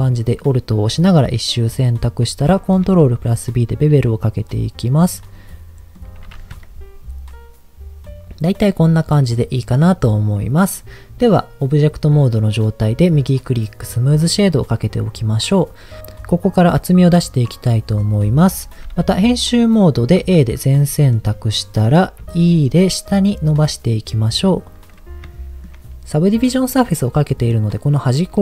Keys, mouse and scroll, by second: 2.7 ctrl+b, 5.0 click, 5.3 middle click, 9.2-10.2 middle drag, 11.2-12.2 scroll down 1, 12.8-13.9 right drag, 14.1-15.7 middle drag, 16.1 middle click, 17.4 middle click, 18.4 Tab, 19.4 middle click, 20.2 a, 20.8 middle click, 22.3 e, 24.6 click, 24.9-25.2 scroll up 1, 25.3 shift+middle click, 26.2 scroll up 1, 27.1 middle click.